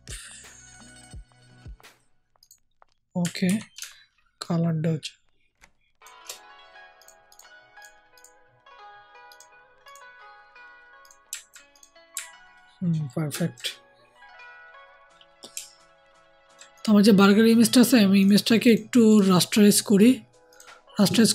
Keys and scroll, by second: 3.4 ctrl+t.